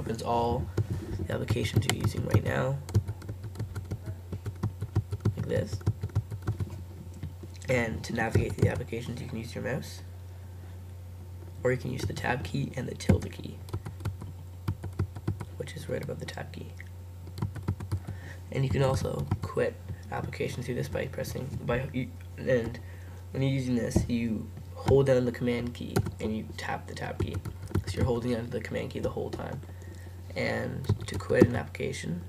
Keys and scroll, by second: 12.1 super+Tab, 13.1 super+`, 26.0 super+Tab, 31.0 super+Tab.